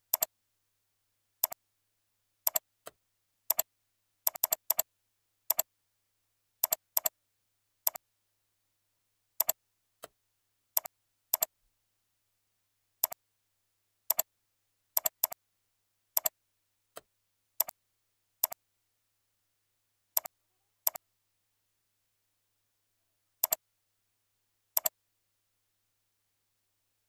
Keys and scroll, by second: 0.5 ctrl+a, 0.8 ctrl+v, 2.7 ctrl+a, 6.7 ctrl+a, 11.0 ctrl+a, 14.4 ctrl+a, 14.7 ctrl+b, 16.7 ctrl+a, 17.9 ctrl+a.